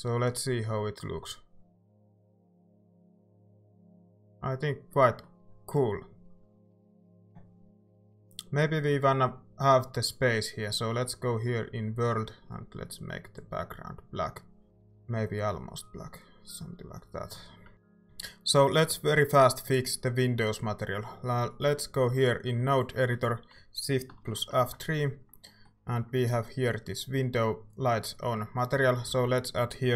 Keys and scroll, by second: 24.6 shift+F3, 29.1 a.